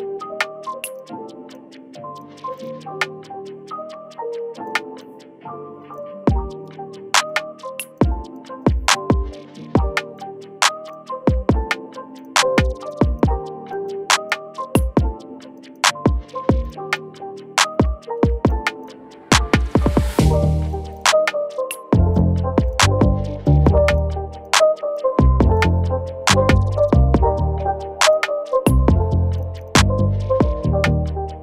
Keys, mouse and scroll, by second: 2.6 double click, 17.8-19.6 scroll down 1, 20.3 double click, 29.5 double click.